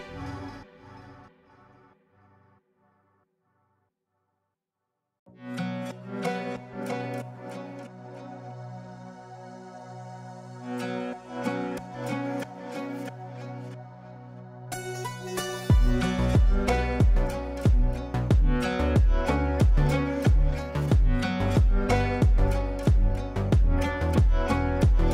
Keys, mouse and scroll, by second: 2.3 ctrl+z, 3.4-6.4 drag, 8.7-10.5 drag, 13.1 right click, 15.0 click, 15.8 shift+Page_Up, 17.1 click, 18.9 right click, 20.5-25.1 drag.